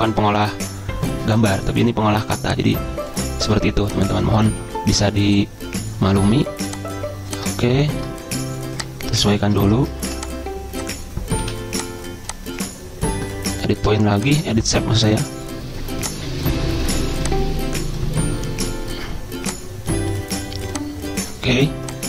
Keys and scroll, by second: 0.4 ctrl+[, 11.6 ctrl+z.